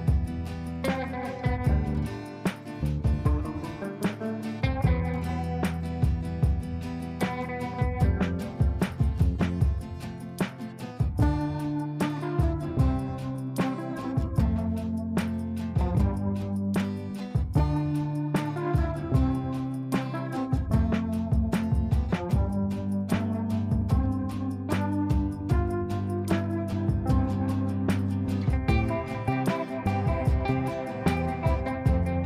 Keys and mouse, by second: 1.4-2.3 shift+drag, 8.0 F3, 8.7 click, 9.0 F3, 10.4-11.0 drag, 13.8-15.1 drag, 20.7-21.9 ctrl+click, 21.6 ctrl+right click, 23.0-26.0 drag, 26.7 F2, 27.0-27.6 drag, 32.0 space.